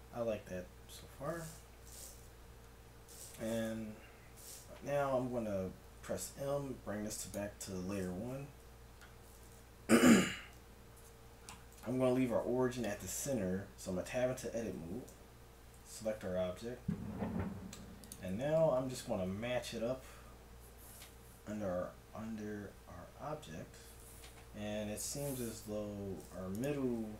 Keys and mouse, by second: 4.9 Tab, 5.8 m, 8.6 1, 10.5 KP_1, 13.3 middle click, 14.1 Tab, 15.1 a, 15.9 g, 18.8 KP_Decimal, 21.4 z, 22.2 g, 25.8 a, 26.5-27.1 right drag.